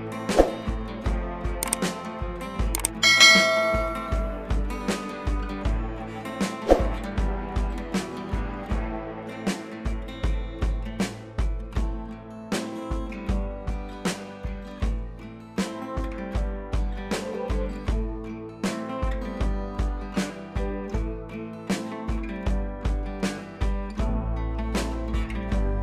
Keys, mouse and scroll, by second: 2.2 click, 3.0 ctrl+t, 3.6-4.3 alt+click, 4.6 scroll up 1, 5.0 shift+click, 6.6 ctrl+z, 6.7 ctrl+click, 9.2 ctrl+z, 9.4-11.1 drag, 12.5 ctrl+z, 12.6 scroll down 1, 13.3-14.0 drag, 15.4 ctrl+a, 15.9 click, 16.7 ctrl+d, 17.0-17.6 scroll up 1, 17.6 click, 17.8 Up, 18.4-18.8 scroll down 1, 18.8 click, 20.6 space, 21.9 click, 23.9 click, 24.5 right click, 25.0 click.